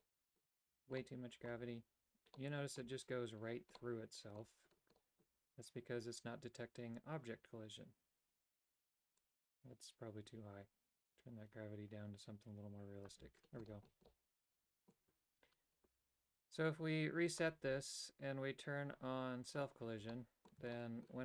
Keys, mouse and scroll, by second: 0.0 middle click, 1.1 middle click, 2.4 middle click, 3.9 middle click, 5.1 middle click, 9.3-13.2 drag, 13.8 shift+middle click, 14.1 middle click, 17.3 click, 19.6 click, 20.2 middle click, 20.8 shift+middle click.